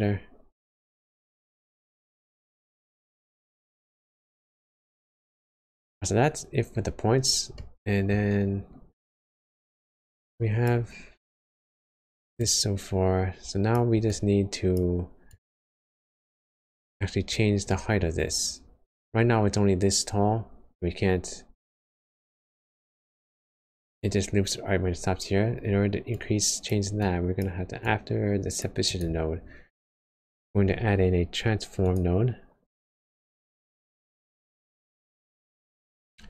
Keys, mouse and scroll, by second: 3.3 space, 3.5 click, 6.1 scroll up 1, 6.3-7.2 scroll down 7, 7.5 middle click, 8.1 scroll down 1, 8.3 scroll up 1, 10.3 click, 11.1 click, 14.1 click, 17.6 middle click, 18.6 scroll up 1, 21.8 click, 22.8 click, 29.9 shift+a, 35.9 click.